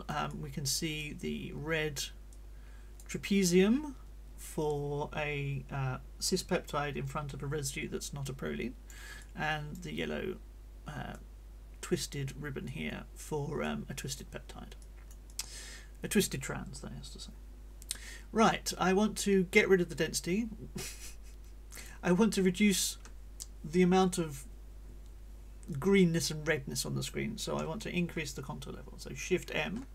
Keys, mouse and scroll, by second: 0.3 right click, 2.3 click, 3.2-9.1 drag, 9.2 click, 11.1-12.5 drag, 12.6 click, 13.6 click, 14.8-22.0 drag, 15.3-22.0 right drag, 25.7-27.3 drag, 29.6 shift+m.